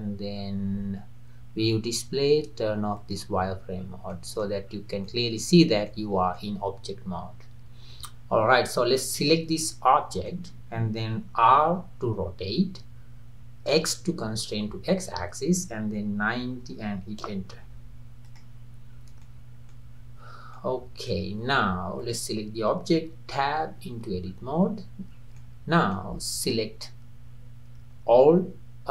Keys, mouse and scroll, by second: 0.3-1.6 scroll down 4, 1.6-3.0 scroll down 2, 3.0 click, 3.5-4.0 scroll up 4, 4.1-4.7 middle drag, 4.7-5.1 scroll down 2, 5.1-5.6 middle drag, 5.6 scroll up 1, 5.9-7.9 middle drag, 7.9-9.2 scroll down 3, 9.2 drag, 9.7-11.6 middle drag, 11.6 r, 18.3 click, 19.0 scroll down 2, 19.2-20.0 middle drag, 20.0-20.6 scroll up 4, 20.6-22.0 middle drag, 22.0 drag, 23.4 Tab, 24.3-24.7 scroll up 2, 25.2 scroll up 1, 25.4-28.4 middle drag.